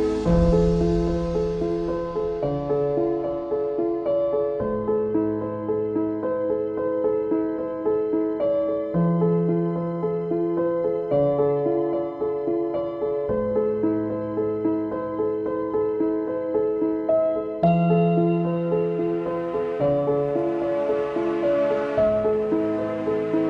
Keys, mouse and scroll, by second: 1.3 click, 1.8 right click, 2.7 ctrl+z, 3.3 ctrl+z, 3.6 ctrl+z, 3.9 ctrl+z, 4.6 ctrl+z, 5.4-6.6 middle drag, 6.6 right click, 6.9 Tab, 7.2 click, 7.5 middle click, 7.8 ctrl+s, 8.5-9.4 scroll down 5, 9.4 click, 9.9 click, 12.4 click, 13.3 click, 14.3 shift+click, 15.1 shift+click, 17.9 ctrl+j, 19.1 click, 20.6 KP_Divide, 21.3-22.0 scroll down 6, 22.0 ctrl+z, 22.4 ctrl+z, 22.7 ctrl+z, 23.3 shift+middle click.